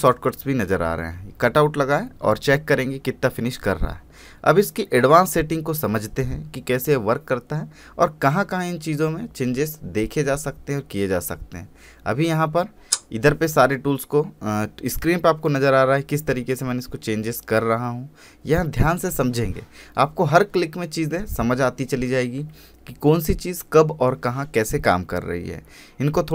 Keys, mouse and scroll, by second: 0.5 click, 2.0 scroll up 1, 2.8-3.4 scroll down 1, 3.4-3.7 scroll up 1, 4.2 scroll down 1, 4.8 click, 6.2 scroll up 1, 7.7 click, 8.7 scroll up 1, 9.5 scroll down 1, 10.1 click, 16.4 click.